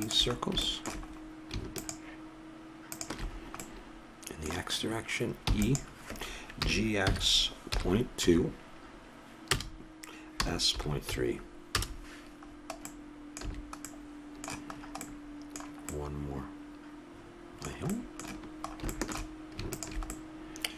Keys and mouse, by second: 5.8 e, 6.9 g, 10.6 s, 12.8-13.8 middle drag, 13.8 a, 20.0 click.